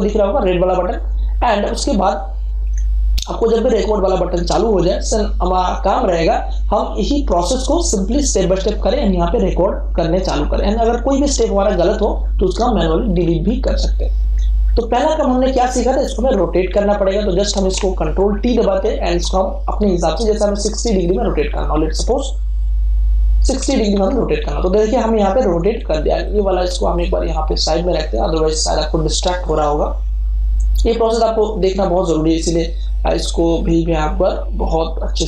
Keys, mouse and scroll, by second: 2.6 Escape, 18.4 ctrl+t, 20.1 click, 20.1-23.5 drag, 23.5 6, 23.9 0, 25.7 click, 27.0-30.5 drag.